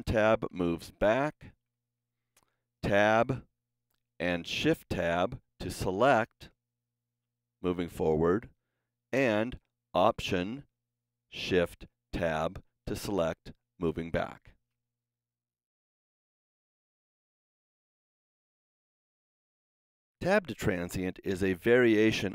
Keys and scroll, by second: 1.2 alt+Tab, 2.7 Tab, 3.6 Tab, 4.5 shift+Tab, 6.1 shift+Tab, 7.0 shift+Tab, 8.4 shift+Tab, 9.6 alt+Tab, 11.5 alt+shift+Tab.